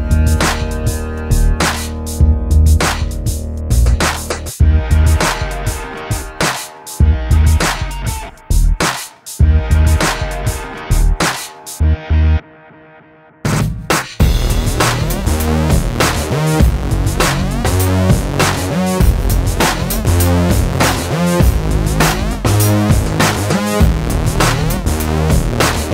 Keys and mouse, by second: 0.2 alt+s, 1.2 ctrl+KP_Subtract, 1.4 alt+s, 1.9 middle click, 2.2 middle click, 2.7 Tab, 3.1 Tab, 3.3 KP_1, 4.4 Tab, 4.9 alt+h, 5.3 a, 5.8 h, 6.0 Tab, 6.5 KP_7, 6.7 z, 7.9 Tab, 8.2 alt+h, 8.8 z, 8.8 a, 10.3 Tab, 11.8 shift+s, 12.4 a, 12.5 Tab, 13.5 h, 13.8 Tab, 14.0 KP_7, 14.4 z, 15.4 e, 15.8 click, 16.0 x, 16.4 click, 17.0 click, 17.1 KP_7, 17.6 b, 17.9 click, 18.4 z, 18.6 a, 19.1 ctrl+s, 20.2 ctrl+r, 21.0 ctrl+2, 21.5 right click, 21.9 ctrl+r, 22.5 middle click, 23.1 Tab, 23.4 alt+h, 24.0 a, 24.4 click, 24.8 middle click, 25.1 middle click, 25.8 ctrl+s.